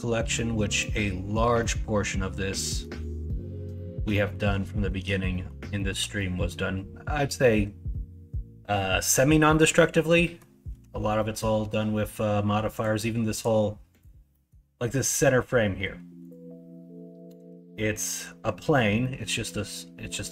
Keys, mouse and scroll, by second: 0.7 middle drag, 1.5-2.8 middle drag, 3.8 middle click, 4.9 middle drag, 5.3 middle drag, 5.7 shift+middle drag, 6.2-6.5 middle drag, 7.4 middle drag, 9.5 middle drag, 10.2 middle drag, 11.2 middle drag, 14.3 middle drag, 14.9 middle drag, 19.0 middle drag, 20.0 middle click.